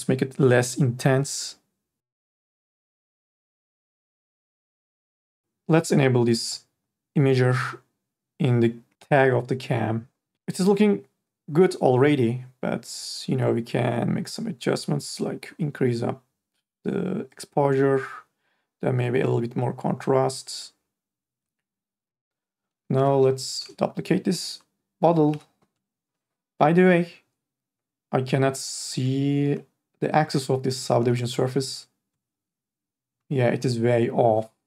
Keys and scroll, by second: 23.2 r, 25.3 e, 31.2 e.